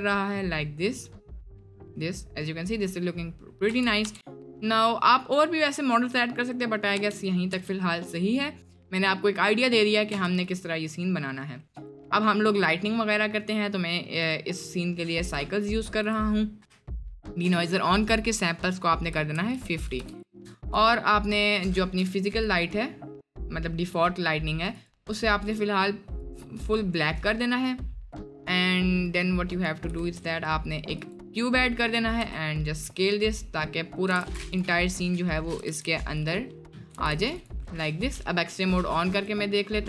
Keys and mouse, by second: 3.7 space, 4.1 space, 7.6 space, 10.5 space, 11.7 click, 14.2-15.7 drag, 16.1 click, 17.0-20.8 drag, 22.4-22.8 drag, 24.8 click, 25.5 click, 26.2 click, 28.5 middle click, 29.0 middle click, 29.5 click, 30.0 shift+a, 31.6 middle drag, 32.2 s, 33.4-33.8 middle drag, 34.0 g, 34.7 middle drag, 35.6 s, 36.9 g, 38.3 click.